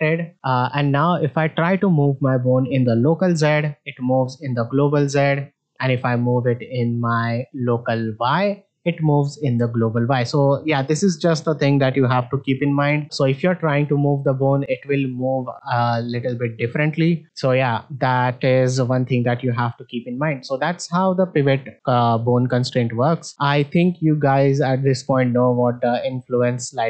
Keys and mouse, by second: 1.2-2.1 drag, 3.4-5.1 drag, 8.1-9.9 drag, 10.7 middle drag, 13.5-15.7 drag, 20.0 middle drag, 23.3-26.8 drag.